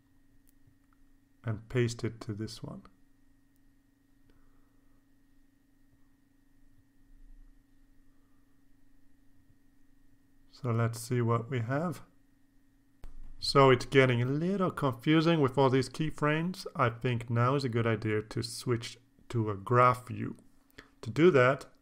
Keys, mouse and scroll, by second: 0.4 ctrl+c, 1.1 ctrl+click, 2.5 click, 3.2 ctrl+v, 5.0 KP_Enter, 7.2-17.5 drag, 20.4 click, 20.9 right click, 21.6 click.